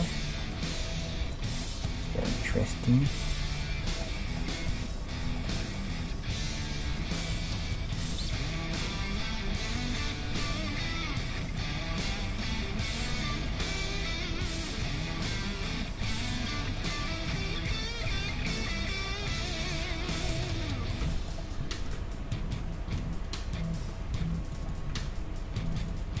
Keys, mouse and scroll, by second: 0.7 g, 1.9 right click, 3.0-11.0 right drag, 9.5-19.9 middle drag, 9.7 g, 12.0-15.0 right drag, 16.4-19.1 right drag, 19.7-21.8 right drag, 20.3-23.1 middle drag, 21.1 f, 22.9 ctrl+e, 24.3 ctrl+r, 25.0 ctrl+Tab, 25.9-26.2 right drag.